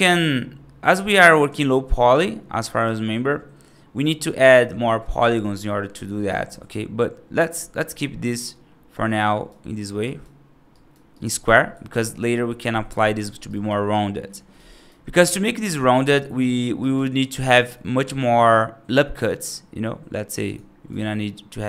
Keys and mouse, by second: 2.5 right click, 6.4 right click, 8.3-9.3 right drag, 9.9 right click, 10.6 right click, 11.0 right click, 11.6 1, 13.3 right click, 13.8 right click, 14.5 right click, 16.2 middle click, 16.7 right click, 17.3 ctrl+r, 20.8 ctrl+r.